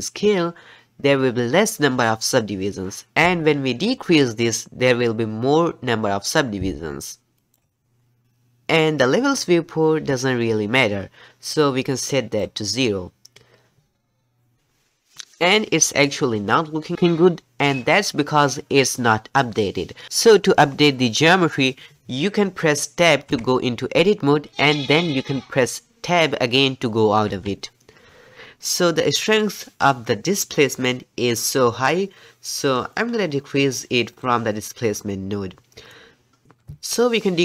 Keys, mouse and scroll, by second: 11.6-14.5 drag, 14.5 ctrl+alt+r, 23.3 Tab, 27.3 Tab, 32.6 middle click, 33.0-34.1 scroll up 11, 34.1 click, 34.5-35.7 scroll up 3, 35.7-36.4 middle drag, 36.4-37.4 scroll up 2.